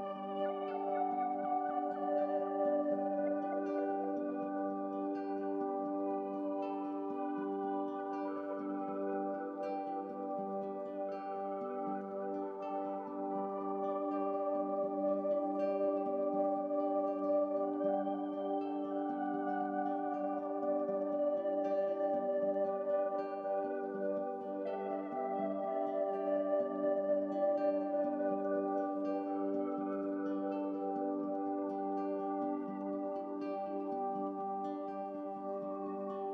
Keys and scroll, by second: 0.9 ctrl+i, 5.1 ctrl+z, 11.0 ctrl+z.